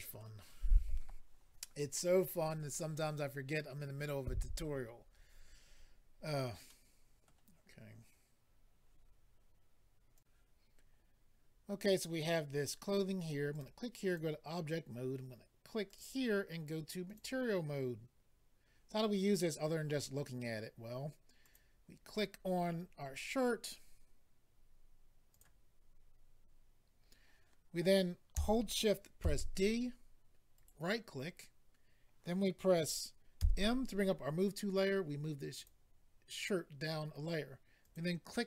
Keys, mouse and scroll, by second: 0.5-0.8 scroll up 1, 6.6 middle click, 10.2 click, 13.5 click, 13.6 click, 14.0 click, 14.1 click, 15.8 click, 15.9 click, 17.0 click, 17.2 click, 21.4 click, 21.5 click, 25.3 click, 30.5 d, 30.5 right click, 35.5 click, 37.8 click, 37.9 click.